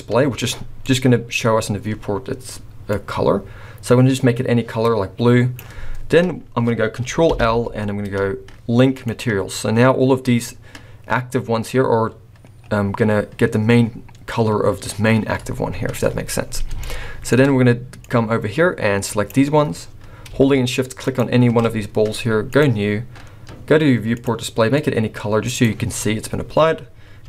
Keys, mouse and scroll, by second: 0.8 click, 5.9-7.1 scroll up 2, 7.2 ctrl+l, 12.8-13.6 scroll up 2, 13.6-14.0 scroll up 1, 15.9-16.4 scroll down 2, 16.4 scroll down 3, 16.8 shift+middle click, 18.0 click, 21.0 shift+click, 22.5 click, 26.3 scroll up 1.